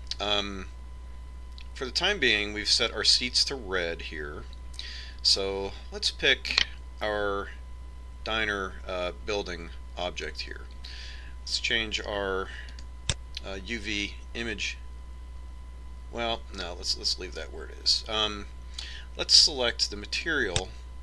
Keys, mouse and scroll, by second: 6.7-8.5 right drag, 13.0-14.9 drag, 17.0-19.0 middle drag, 20.5-21.0 drag.